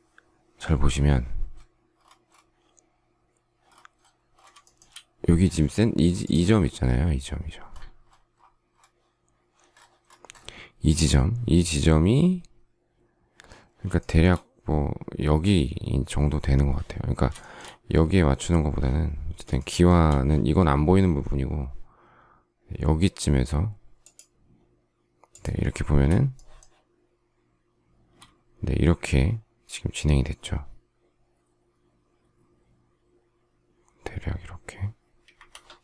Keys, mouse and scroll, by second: 4.6 shift+middle click, 13.9 shift+middle click, 17.4 shift+middle click, 19.5 shift+middle click, 26.3 shift+middle click, 35.3 Escape.